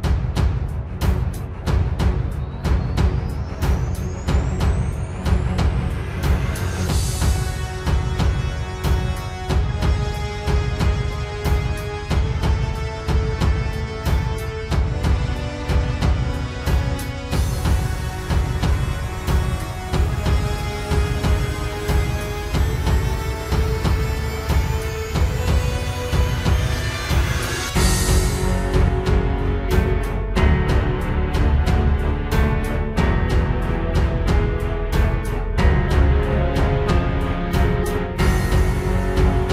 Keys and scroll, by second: 0.1 ctrl+s, 0.3 ctrl+space, 0.8 ctrl+space, 2.4 ctrl+space, 2.7 ctrl+z, 3.6 ctrl+z, 5.1 ctrl+z, 6.4 ctrl+z, 10.8 ctrl+space, 11.1 ctrl+s, 11.6 ctrl+space, 12.9 ctrl+space, 13.4 ctrl+space, 15.1 ctrl+space, 17.7 ctrl+z, 18.6 ctrl+z, 19.3 ctrl+z, 20.7 ctrl+space, 21.6 ctrl+space, 22.2 ctrl+space, 23.3 ctrl+space, 24.0 ctrl+space, 25.6 ctrl+t, 26.0 ctrl+z, 27.0 ctrl+j, 27.8 ctrl+space, 28.0 ctrl+t, 31.6 ctrl+space, 32.4 ctrl+j, 32.6 ctrl+t, 33.2 ctrl+space, 34.0 ctrl+space, 34.3 ctrl+z, 37.0 ctrl+space, 37.5 ctrl+j, 37.7 ctrl+z, 37.9 ctrl+t, 39.3 ctrl+space.